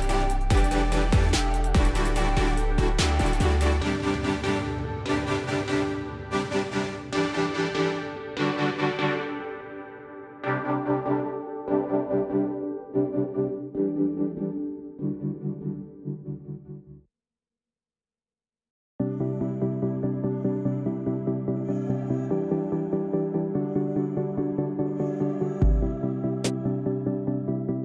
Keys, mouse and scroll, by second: 0.4 click, 0.9 click, 1.6 click, 2.1 scroll, 2.8 click, 5.2-7.5 typing, 8.4 Tab, 8.6 Tab, 9.1-9.9 typing, 10.2 Tab, 11.2 Return, 11.8-12.6 typing, 15.2 click, 22.3 click, 24.8-27.5 typing.